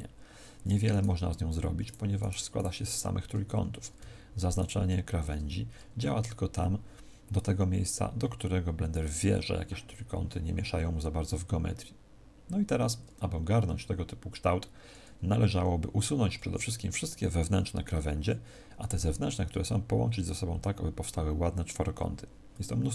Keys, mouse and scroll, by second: 0.8 right click, 1.8 right click, 3.5 a, 4.5 alt+shift+right click.